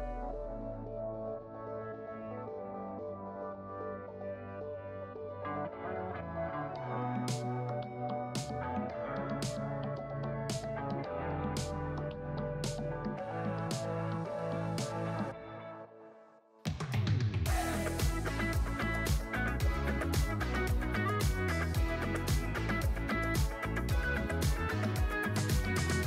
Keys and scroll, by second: 0.2 alt+q, 0.5-0.8 ctrl+z, 1.9 g, 2.3 g, 2.7 g, 3.0 alt+q, 4.1 alt+q, 4.8 alt+q, 5.2 alt+q, 5.4 alt+q, 5.7 g, 6.2 g, 7.0 alt+z, 7.3 alt+z, 7.5 g, 7.7 alt+q, 8.2 alt+q, 8.5 g, 8.9 alt+q, 9.1 alt+q, 9.6 alt+q, 9.8 alt+q, 10.0 g, 10.4 alt+q, 10.6 alt+q, 10.7 g, 11.1 g, 12.0 alt+q, 12.1 alt+q, 12.3 g, 12.8 g, 13.2 alt+q, 13.3 alt+q, 13.4 alt+q, 13.5 alt+q, 13.6 g, 14.5 Tab, 14.7 Tab, 14.9 alt+q, 14.9 1, 15.1 1, 15.2 1, 16.2 ctrl+Tab, 17.2 k, 18.4 alt+q, 19.6 g, 20.6 j, 21.1 Tab, 21.2 Tab, 21.6 g, 23.6 g, 24.2 Tab, 24.4 Tab, 24.6 alt+q, 25.1 k.